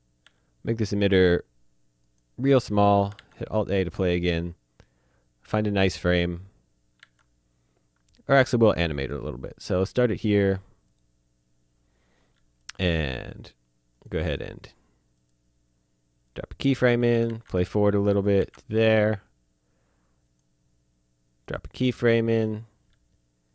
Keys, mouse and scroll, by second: 0.2 s, 2.0 click, 3.2 alt+a, 6.9 alt+Num_Lock, 7.1 alt+a, 8.4 click, 10.8 right click, 13.9 click, 15.2 right click, 16.3 click, 17.3 alt+a, 18.5 a, 19.1 click, 21.4 right click, 22.3 click.